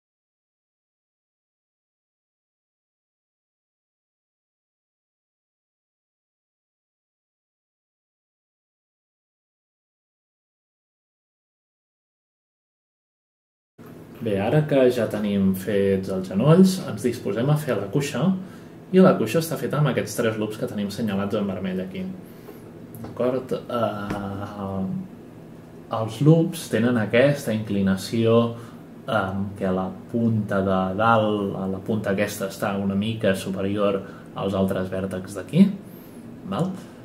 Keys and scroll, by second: 8.9 F10, 9.5 F8, 10.6 F10, 11.0 ctrl+shift+a, 11.1-12.0 space, 13.7 F8.